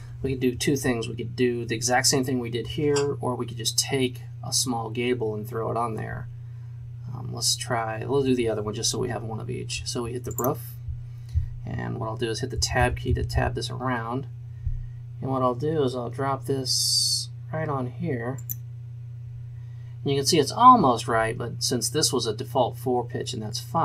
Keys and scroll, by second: 12.7 Tab, 13.3 Tab.